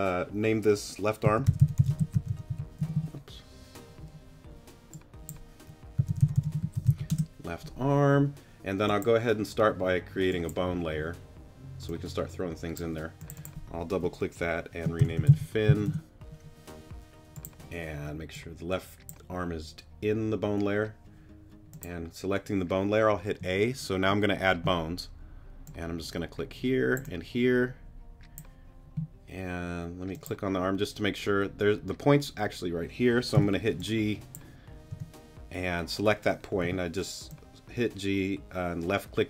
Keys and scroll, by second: 1.2-2.8 typing, 6.0-6.9 typing, 7.1 Return, 15.0 shift+f, 15.2 shift+i, 15.3 n, 15.8 Return, 23.4 a, 33.3 g, 34.9 t, 36.6 g.